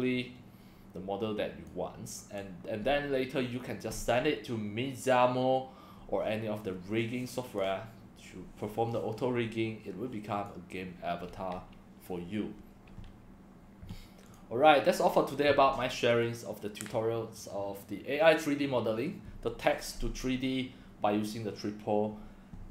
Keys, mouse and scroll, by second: 7.2 drag, 8.9-10.5 drag, 14.3 click.